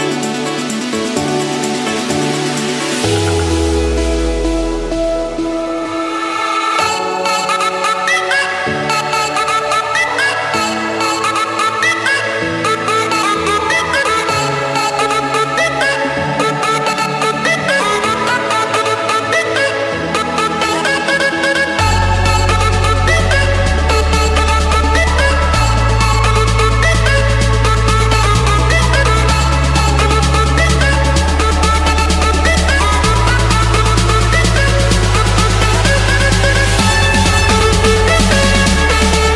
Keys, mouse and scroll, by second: 0.9-1.8 typing, 3.7 Return, 5.4 middle click, 5.9 Escape, 6.5-7.7 typing, 8.0 Return, 9.5 click, 9.8 Return, 12.2-13.2 drag, 13.6 Escape, 14.5 click, 16.0-16.4 scroll, 17.0 click, 17.4-17.9 scroll, 17.9 click, 17.9 Escape, 18.3 click, 18.9 click, 20.1 click, 23.5 right click, 24.9 click, 26.1 click, 26.8 Escape, 28.0 click, 28.9 click, 31.0 click, 31.5 Escape, 34.9 click, 36.5-38.1 typing, 39.2 typing.